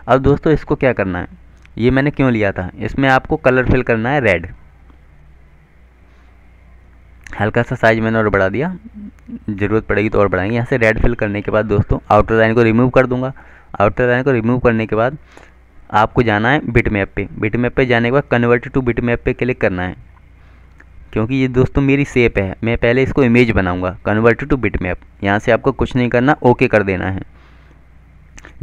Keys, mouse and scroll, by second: 5.1 click, 7.0 shift+click, 8.1 click, 11.7 click, 13.3 right click, 14.4 click, 25.5 click.